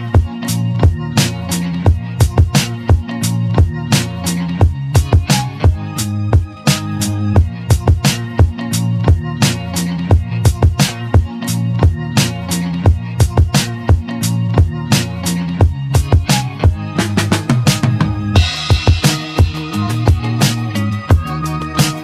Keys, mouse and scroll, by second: 3.1 Tab, 3.8 Tab, 4.3 click, 5.3 click, 6.0 click, 8.7 shift+d, 10.7 p, 11.5 Tab, 12.8 click, 13.8 Tab, 14.8 click, 15.5 3, 15.7 click, 16.8 e, 21.3 s.